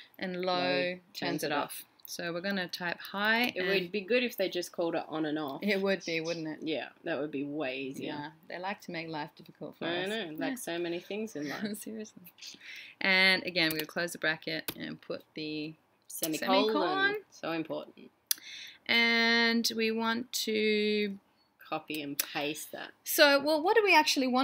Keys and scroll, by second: 2.2-3.3 typing.